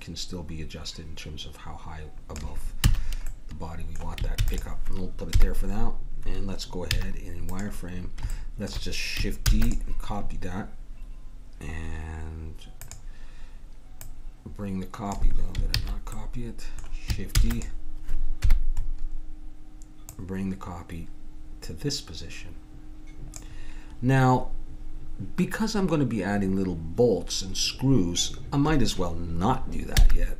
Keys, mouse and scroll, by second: 2.8 a, 4.4 ctrl+s, 5.3 KP_1, 6.9 z, 9.5 shift+d, 9.7-11.4 drag, 12.8-16.1 drag, 15.8 ctrl+z, 17.3 shift+d, 18.4 KP_1, 20.1 click, 29.9 x.